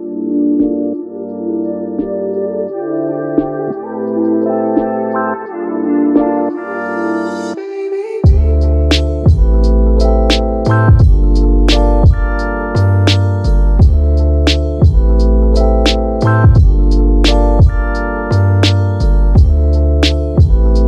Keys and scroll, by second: 1.0 super+z, 5.5 super+s, 5.9 Right, 6.1 BackSpace, 6.3 7, 6.4 Return, 14.9 super+z.